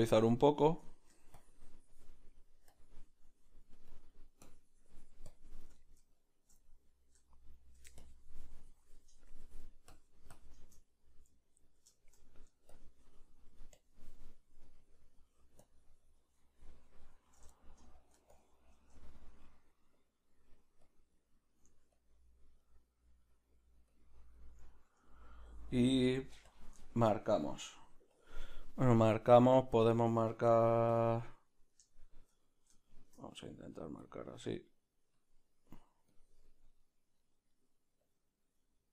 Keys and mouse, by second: 0.8 shift+middle click, 6.2-12.3 middle drag, 8.0 shift+click, 12.3-23.2 drag, 17.5 shift+middle click, 21.3 middle click, 23.2 middle click, 23.9 click, 24.3-26.5 middle drag, 26.5 click, 26.8 shift+middle click, 27.6 click, 28.1-31.0 middle drag, 28.1 f, 31.0-32.4 drag, 31.3-34.0 middle drag, 34.0 click, 34.7-38.9 drag, 36.8 middle click.